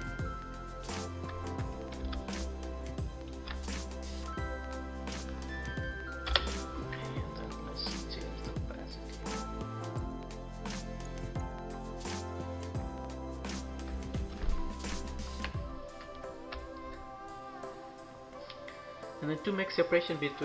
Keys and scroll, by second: 6.1 Return, 13.8 ctrl+-, 14.9 ctrl+=.